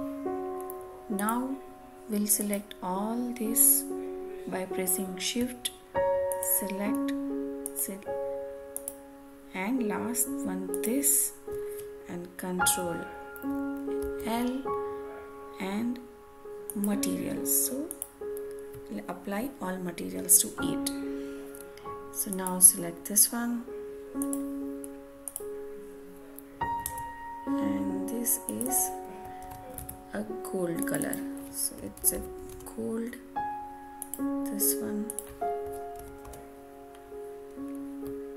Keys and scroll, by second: 13.9 ctrl+l, 26.8 alt+Tab, 29.3 ctrl+c, 29.7 alt+Tab, 32.4 Return, 35.9 ctrl+v, 37.4 Return.